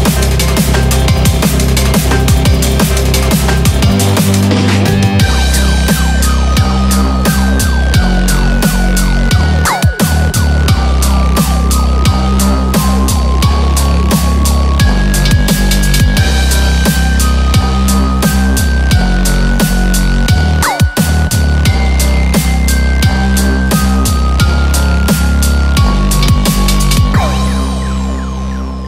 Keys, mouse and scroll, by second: 9.6 click, 9.6 scroll down 1, 10.7 click, 12.5 click, 14.5 click, 16.3 click, 16.9 click, 18.6 click, 19.5 click, 24.8 click, 26.1 click, 26.9 click.